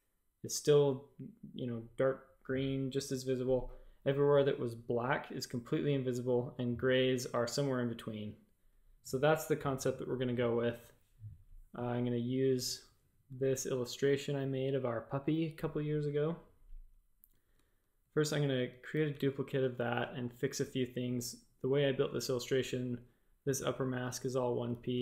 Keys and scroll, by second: 13.3 v, 19.1 shift+super+a, 22.0 a.